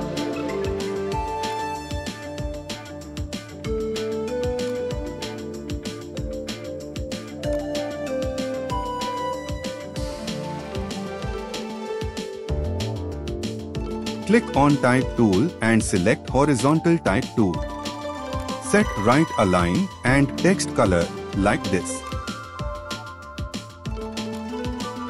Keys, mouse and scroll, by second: 9.9 alt+scroll up 1, 11.4 alt+scroll, 11.5 scroll up 1, 15.3 right click, 22.2 click.